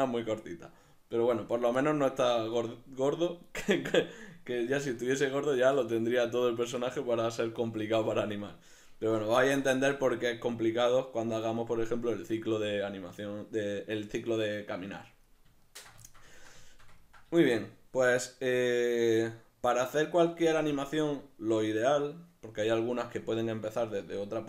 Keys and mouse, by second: 1.9-10.8 middle drag, 5.8 alt+q, 15.7 ctrl+middle click.